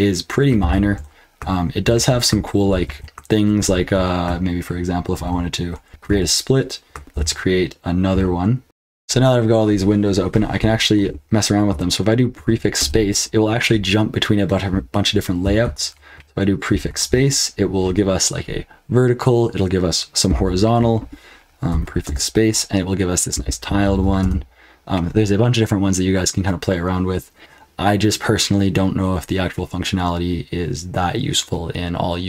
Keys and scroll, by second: 0.6 ctrl+l, 1.8 ctrl+[, 2.6 ctrl+l, 2.8 ctrl+l, 3.6 ctrl+a, 5.1 ctrl+b, 6.1 ", 7.1 ctrl+b, 8.6 super+l, 8.6 super+h, 8.6 F12, 12.3 ctrl+b, 12.8 space, 15.6 ctrl+l, 16.7 ctrl+b, 17.0 space, 21.7 ctrl+b, 22.0 space, 23.8 ctrl+b, 24.2 space, 27.4 ctrl+l.